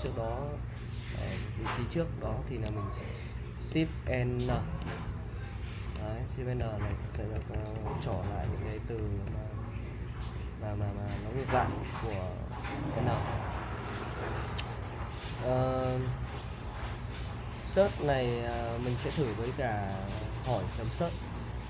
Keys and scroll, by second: 4.0 shift+n, 6.0-11.3 typing, 20.6 BackSpace.